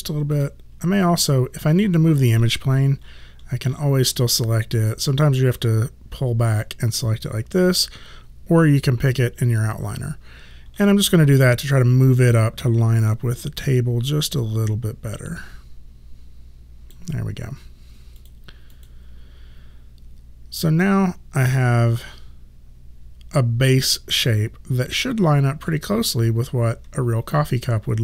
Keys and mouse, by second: 0.4 click, 5.5 click, 13.2 click, 18.2 click.